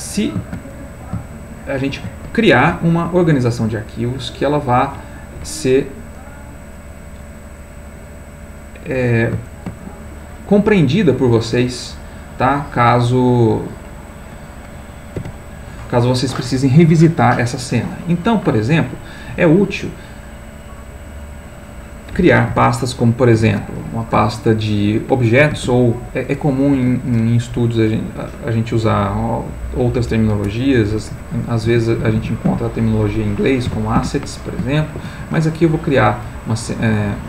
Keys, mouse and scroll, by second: 0.7 shift+click, 1.8 shift+click, 5.1 click, 7.6 click, 8.7 click, 9.5 shift+click, 9.8 shift+click, 12.3 click, 13.7 click, 14.1 click, 15.2 Delete, 21.9 click, 23.3 ctrl+shift+n, 25.5 shift+a, 26.7 BackSpace, 31.7 a, 32.0 s, 32.5 e, 33.7 t, 34.0 s, 34.8 shift+Home.